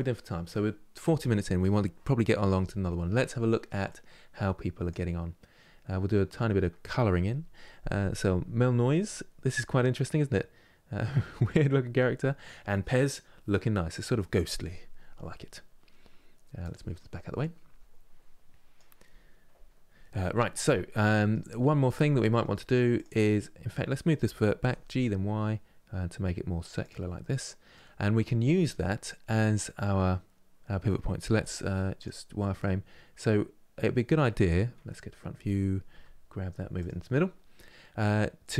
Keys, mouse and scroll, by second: 20.6 middle click, 21.3 scroll up 1, 21.6 Tab, 22.0 middle click, 22.6 click, 23.0-24.3 middle drag, 24.3 g, 26.9-29.9 middle drag, 31.0 z, 32.1-34.5 middle drag, 34.5 KP_1, 35.6 g.